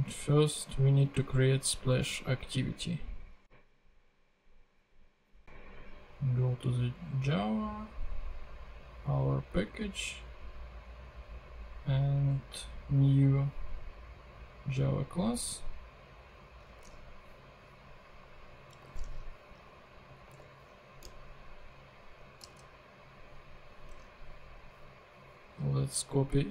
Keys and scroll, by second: 2.7 super+Tab, 16.9 super+Tab, 18.9 super+c, 19.1 super+Tab, 20.5 super+v, 21.1 super+Return, 22.5 Return, 24.0 super+Tab.